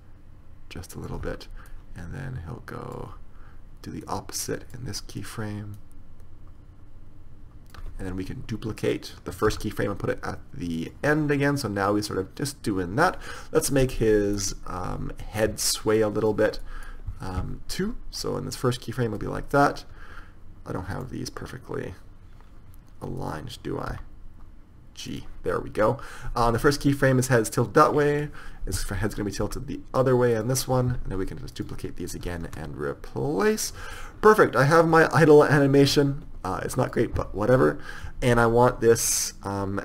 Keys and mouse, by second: 5.5-7.8 right drag, 9.8 shift+d, 11.5 drag, 14.0-16.4 right drag, 14.3-16.4 middle drag, 16.4 click, 24.4 g, 27.1-28.4 drag, 29.8 r, 32.6 shift+d, 34.3 click, 35.9 click.